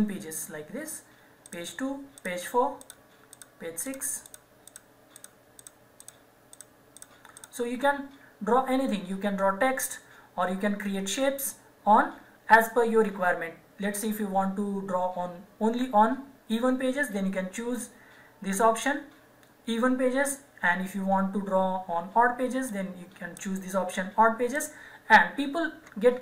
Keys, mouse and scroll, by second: 17.8 click, 22.7 click.